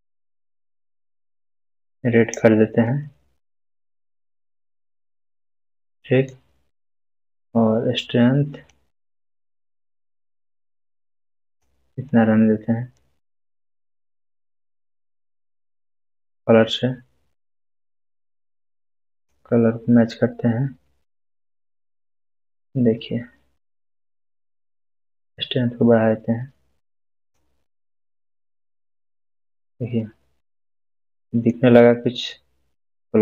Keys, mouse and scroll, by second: 3.2 scroll up 1, 4.4-6.3 middle drag, 8.6 middle click, 9.0-11.8 drag, 12.2-14.2 scroll down 2, 16.3 scroll down 1, 23.6-27.6 drag, 28.1-29.3 middle click, 29.4-30.3 scroll down 1, 30.9-31.5 middle click, 31.2-31.5 scroll up 1.